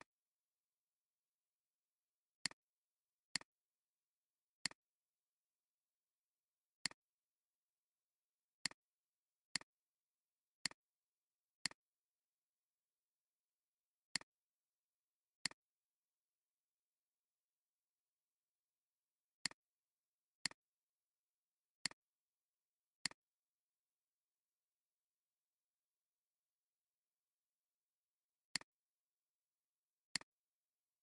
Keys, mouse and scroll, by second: 3.9 alt+scroll up 1, 6.8 shift+click, 9.0 alt+scroll down 1, 9.4 space, 9.9 space, 10.2 alt+scroll, 10.2-10.6 alt+scroll up 3, 10.6 space, 11.2 alt+scroll down 2, 12.0 space, 13.6 ctrl+z, 16.7 Right, 16.9 Right, 17.1 Right, 17.4 Right, 17.7 Right, 17.8 Right, 18.3 Right, 19.9 alt+scroll, 20.0 alt+scroll down 1, 20.3 space, 21.0-21.5 alt+scroll up 4, 21.7 space.